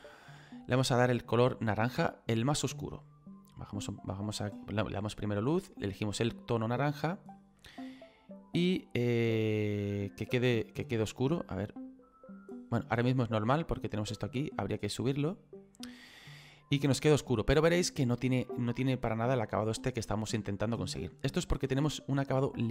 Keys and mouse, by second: 0.6 click, 3.4 click, 5.6 click, 9.1 click, 11.9 click, 13.9 click.